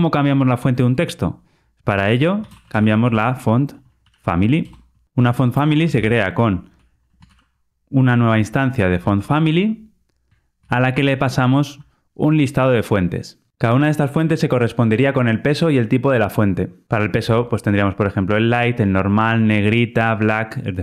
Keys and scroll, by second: 4.6 Return, 8.3 Return, 10.5 Return.